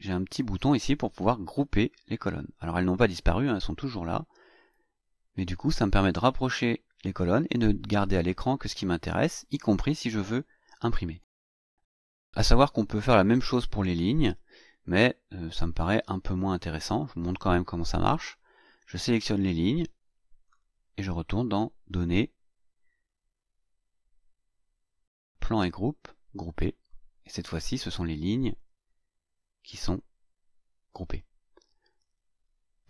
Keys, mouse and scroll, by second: 1.4 click, 2.5 click, 3.9 click, 14.7 click, 19.1-20.6 drag, 21.9 click, 26.4 click, 28.4 click, 29.8 click, 31.9 click.